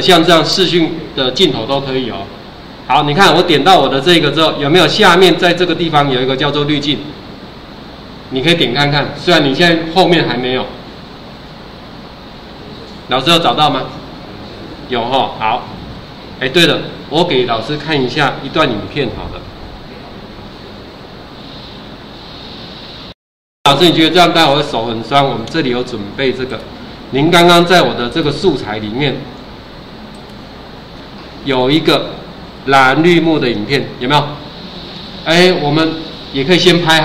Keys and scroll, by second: 16.0 ctrl+4.